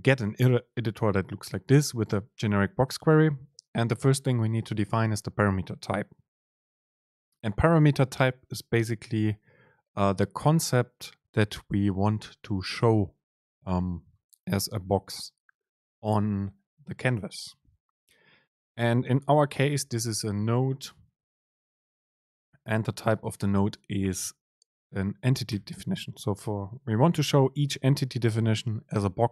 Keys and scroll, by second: 0.5 shift+Down, 1.4 Down, 1.7 Up, 2.9 Down, 20.3 BackSpace, 20.9 super+space.